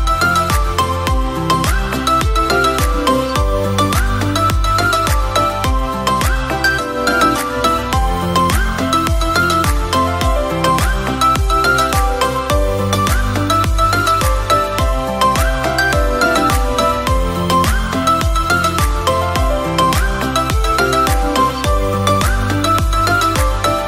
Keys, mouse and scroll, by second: 7.3-8.0 scroll down 3, 8.0-11.8 drag, 11.8-12.8 middle drag, 12.8-13.2 drag, 13.9-15.5 middle drag, 15.5-16.1 scroll down 1, 16.1-20.1 middle drag, 20.1-21.6 scroll down 4, 21.6-22.8 scroll down 1, 21.6 shift+a.